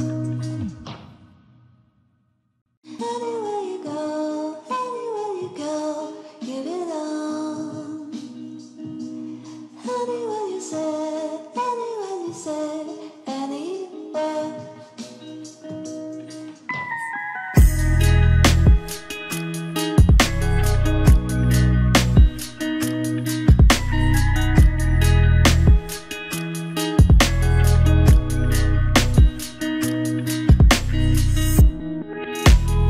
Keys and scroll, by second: 11.2 ctrl+a, 17.3 ctrl+t.